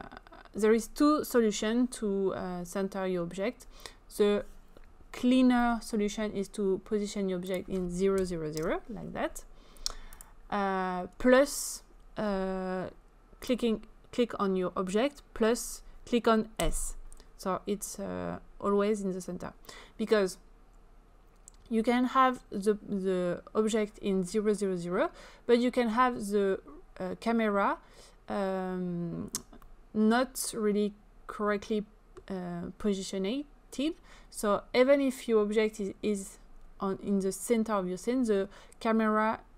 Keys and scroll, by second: 8.2 0, 8.5 Return, 16.6 s.